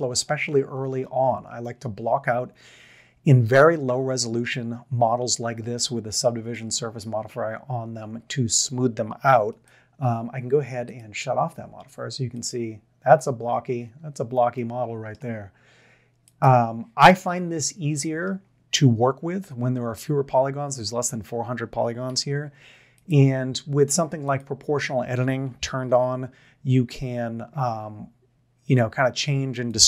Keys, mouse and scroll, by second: 5.7-6.5 middle drag, 9.3 Tab, 14.0 Tab, 14.5-15.1 middle drag, 17.1-18.2 middle drag, 22.2 1, 25.9 g.